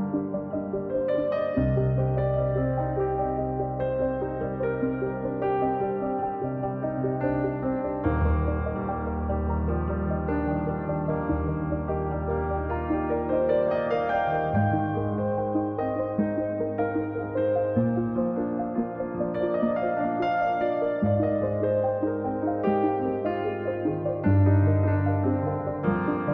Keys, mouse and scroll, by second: 0.2 click, 0.8-2.0 drag, 5.4-6.6 drag, 8.3-9.5 drag, 13.4-16.2 drag, 16.5-18.2 drag, 18.2-18.6 scroll down 7, 18.6-19.0 scroll up 4, 19.0-19.4 scroll down 1, 19.4 click, 19.6-20.0 scroll up 3, 20.0-22.4 drag.